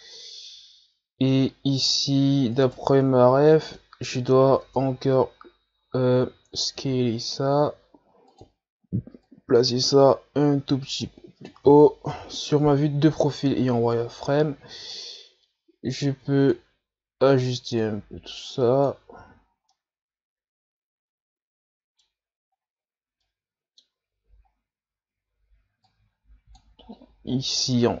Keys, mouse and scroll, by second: 2.6 right click, 3.7 middle click, 4.6 Tab, 5.8 a, 6.2 a, 6.8 s, 9.3-12.2 drag, 12.2 KP_3, 13.1 z, 13.7-14.5 scroll up 3, 14.9-19.2 drag, 19.2 z, 19.4-19.7 scroll down 2, 19.7-22.5 middle drag, 22.5-23.2 scroll up 3, 23.2-24.5 middle drag, 24.5 scroll up 2, 25.9-28.0 drag.